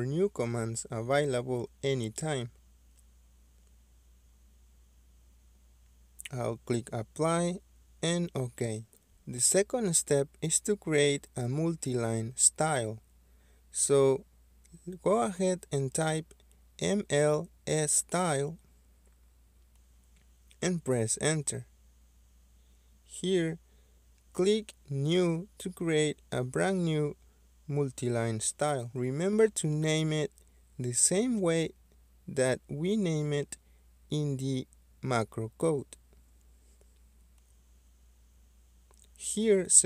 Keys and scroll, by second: 8.4 Escape, 11.8 Escape, 11.8-14.2 typing, 18.2 Return, 26.5-27.3 typing.